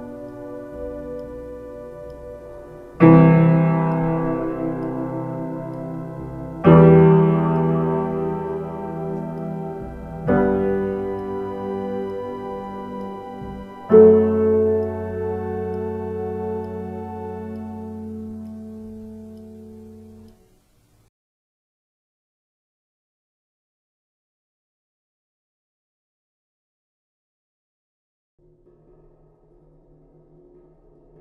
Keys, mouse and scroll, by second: 20.9 x.